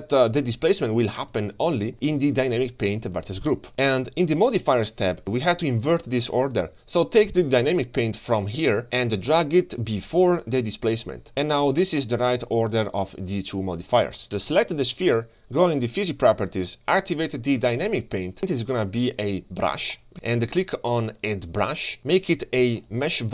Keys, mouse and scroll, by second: 3.7 g, 8.8-11.0 drag, 12.2 click, 14.2 click, 14.2 g, 14.2 space, 14.4 g, 16.0 click, 17.9 click, 18.5-20.1 drag, 21.1 click, 22.8-23.3 drag.